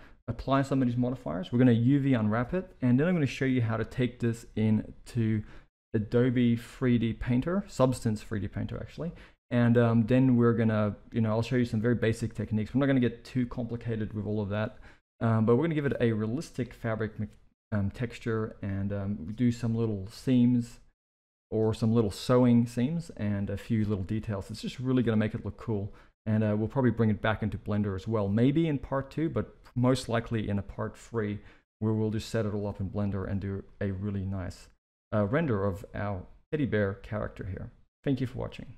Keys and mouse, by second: 33.6-37.8 middle drag.